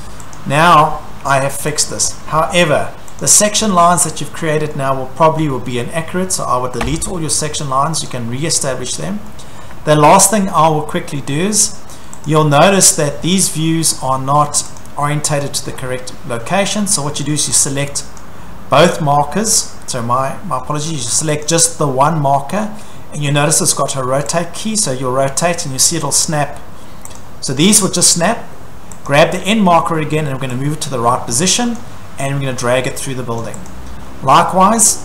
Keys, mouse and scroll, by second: 0.4 click, 0.8 scroll, 1.8 click, 2.1 scroll, 2.3 Delete, 3.2 click, 4.7 middle click, 6.9 Delete, 8.1 click, 8.8 middle click, 8.9 middle click, 9.0 middle click, 9.6 middle click, 9.9 middle click, 9.9 middle click, 10.2 Escape, 10.4-11.8 scroll, 12.3 click, 12.8-13.4 scroll, 13.3 Escape, 13.9-14.2 scroll, 14.8 click, 15.1-16.6 scroll, 15.3 Escape, 17.0 scroll, 17.2 Escape, 18.2 click, 19.5 Escape, 20.5-20.9 scroll, 21.4 click, 26.0 click, 26.7-27.2 scroll, 27.2 click, 27.5-28.3 scroll, 29.1 click, 29.8-30.2 scroll, 31.8 click, 33.4 click, 33.7 click, 33.9-34.2 scroll.